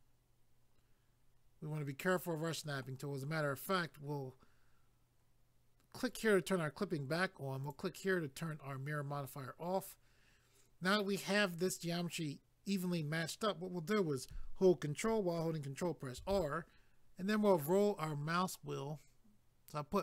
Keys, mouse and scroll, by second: 6.1 click, 7.6 click, 16.2 ctrl+r, 17.0-18.2 scroll up 1, 18.2 scroll up 1.